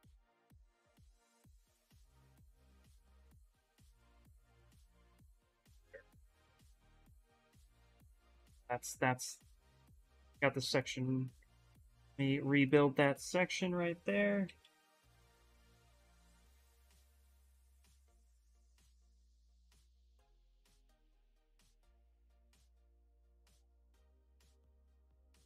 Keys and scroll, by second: 3.6-4.7 typing, 7.9 ctrl+z, 8.0 ctrl+z, 8.1 ctrl+z, 8.3 ctrl+z, 8.5 ctrl+z, 8.6 ctrl+z, 8.8 ctrl+z, 9.3-10.2 typing, 13.7-14.9 typing, 18.4-19.3 typing.